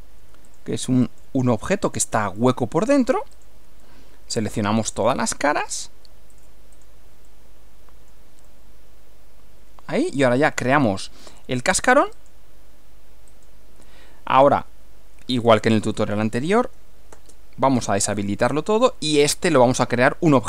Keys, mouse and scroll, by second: 0.5 ctrl+click, 1.0 ctrl+click, 1.9 ctrl+click, 2.3 ctrl+middle click, 3.3 ctrl+click, 3.8 ctrl+middle click, 4.9 ctrl+click, 5.6 ctrl+click, 6.3 ctrl+click, 6.7 ctrl+click, 7.3-8.3 ctrl+middle drag, 8.5-10.3 middle drag, 12.1 click, 13.3 click, 14.5 click, 15.3-15.6 scroll up 1, 16.4 shift+click, 17.1 space, 17.7 scroll down 1, 18.7 click, 19.9 click.